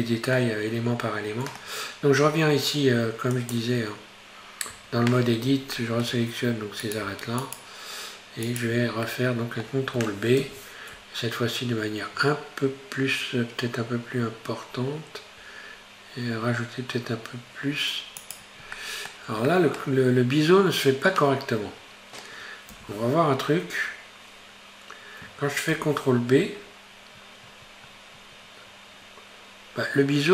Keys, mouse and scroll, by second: 0.4-3.4 middle drag, 3.4 click, 4.9 Tab, 5.8-6.8 shift+middle drag, 6.8 right click, 8.5 shift+right click, 9.1-10.4 middle drag, 10.4 ctrl+b, 18.8-20.0 middle drag, 20.0-22.7 scroll up 3, 22.7 ctrl+v, 26.6 ctrl+b.